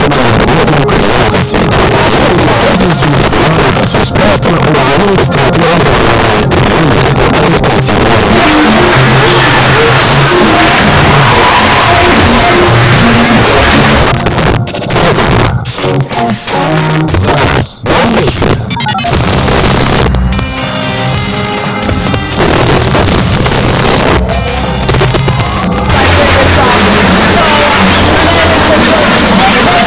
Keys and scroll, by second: 0.0 Down, 0.1 Return, 14.0 Page_Down.